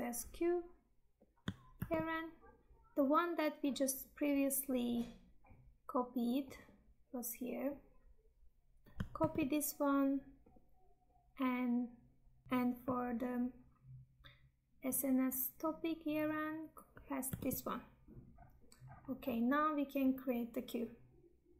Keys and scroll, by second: 1.7 ctrl+v, 9.1 ctrl+c, 17.3 ctrl+v.